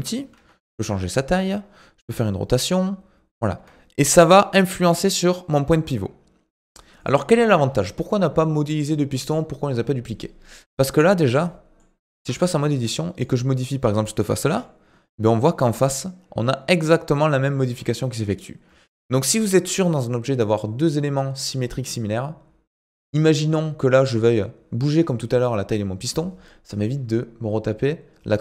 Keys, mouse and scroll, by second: 2.0 r, 4.2 g, 7.0 click, 7.5-10.6 scroll up 2, 11.0 scroll down 2, 11.2-12.2 middle drag, 12.2 Tab, 12.7 middle click, 13.1 click, 13.5-14.4 scroll up 1, 14.4 g, 18.7 Tab, 23.4-24.0 scroll up 1, 24.0 Tab.